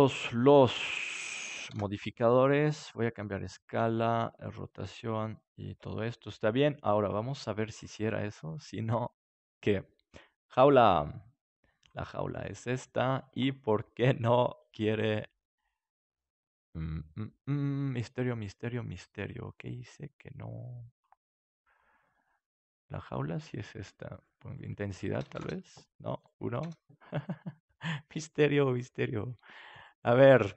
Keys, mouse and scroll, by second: 1.6 ctrl+a, 3.7 ctrl+a, 8.3 middle click, 8.6-10.5 drag, 11.7-13.6 drag, 14.2-15.3 right drag, 15.3-18.3 middle drag, 19.2-21.4 drag, 21.4-24.3 right drag, 22.9-28.1 drag, 27.9-29.9 middle drag, 29.9-30.5 right drag.